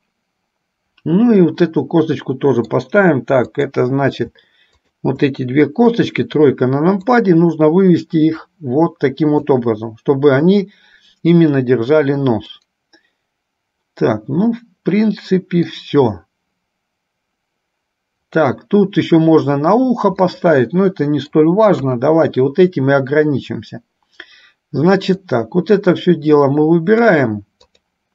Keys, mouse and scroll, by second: 0.1-3.1 middle drag, 3.7 click, 5.0 shift+click, 6.1 KP_3, 7.4-9.6 drag, 12.7-16.0 middle drag, 20.5-21.6 middle drag, 22.0 KP_1, 25.4-27.4 drag, 27.9 click.